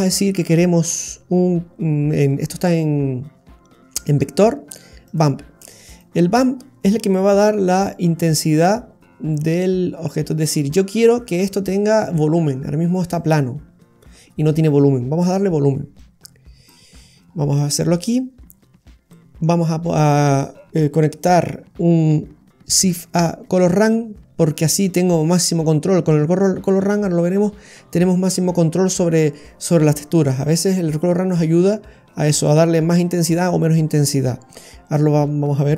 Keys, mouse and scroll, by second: 16.0 click, 17.0-17.6 scroll down 3, 17.7 middle click, 18.6-19.0 scroll down 5, 19.1 middle click, 22.8 shift+a.